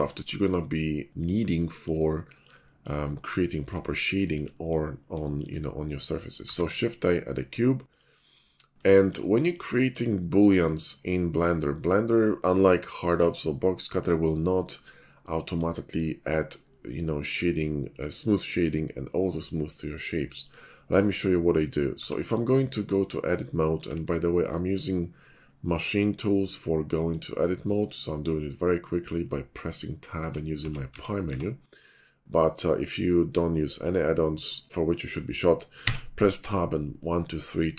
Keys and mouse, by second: 0.4 middle click, 0.9 click, 1.4-1.9 shift+right drag, 1.9 click, 2.6 shift+middle drag, 3.5 shift+middle drag, 6.4 shift+a, 14.4 middle click, 16.7-17.4 shift+middle drag, 20.3 shift+middle click, 22.0 Tab, 23.8 Tab, 30.6 Tab, 30.9 Tab, 31.3 Tab, 35.8 Tab.